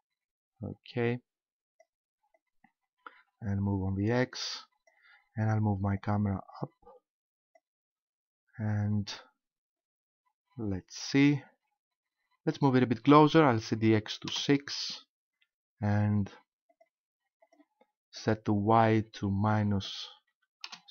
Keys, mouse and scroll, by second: 2.4 click, 6.0 click, 10.2-11.7 scroll up 1, 12.6 click, 16.7 click, 17.4 click.